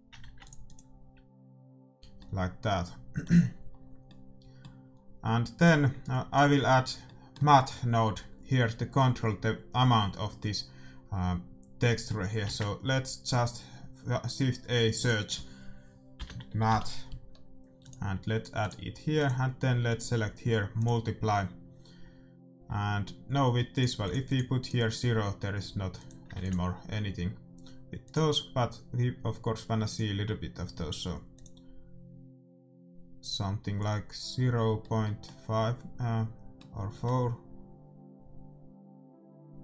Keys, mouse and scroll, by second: 0.4 ctrl+s, 1.2-2.9 drag, 2.5 middle click, 6.0-7.4 drag, 6.0 middle click, 7.0-11.6 middle drag, 11.8-15.6 middle drag, 12.4 shift+a, 18.8-21.1 drag, 23.0 middle click, 23.9-28.0 drag, 26.6 ctrl+s, 28.2-35.1 drag, 34.9-38.6 middle drag.